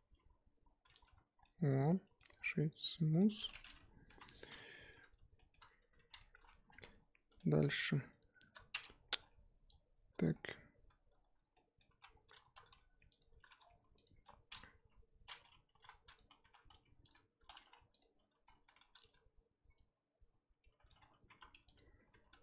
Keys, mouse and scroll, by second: 0.0 g, 1.0 Tab, 1.3 scroll down 1, 1.4-2.3 middle drag, 2.3-3.2 right drag, 3.2 shift+middle drag, 3.3 scroll down 1, 3.5 middle drag, 3.7-4.1 scroll up 3, 4.1 KP_1, 4.7 shift+middle drag, 4.9-5.3 scroll up 1, 5.3 shift+middle drag, 5.6 scroll up 1, 5.8 Tab, 6.0 z, 6.2 shift+middle drag, 6.4-6.7 scroll up 1, 6.7 1, 7.4 middle click, 7.9-9.2 scroll down 2, 9.2 KP_1, 10.2 click, 10.3-11.5 scroll up 1, 11.5-12.0 middle drag, 12.0 z, 12.1 scroll down 2, 12.4 3, 13.2 alt+click, 14.0 alt+click, 14.6 scroll up 1, 14.8 KP_1, 15.7 g, 18.0 alt+click, 18.3 s, 21.8 alt+click, 22.1 s.